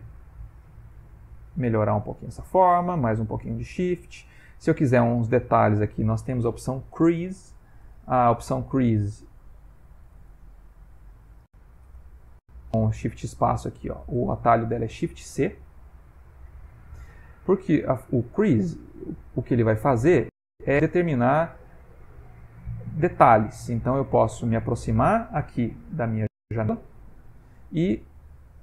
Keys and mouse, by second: 0.4 click, 0.9 click, 1.4 click, 2.2 click, 2.7-3.8 shift+click, 7.2 ctrl+space, 9.5 ctrl+space, 10.0 shift+space, 12.6 shift+space, 14.5 shift+space, 16.4 shift+click, 17.5 ctrl+middle click, 19.6 middle click, 22.2 click, 25.2 ctrl+middle click, 26.0 middle click, 28.1 click.